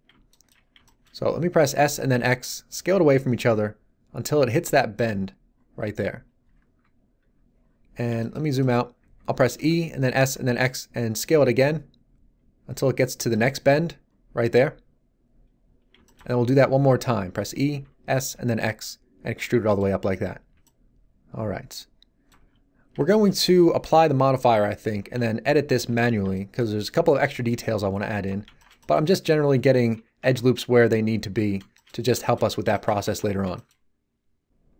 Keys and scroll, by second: 1.7 s, 2.0 x, 9.5 e, 10.0 s, 10.3 x, 17.2 e, 17.7 s, 18.2 x, 22.3 z, 25.0 Tab, 25.9 z, 29.3 Tab, 29.9 z, 30.2 Tab, 31.3 z, 33.0 Tab.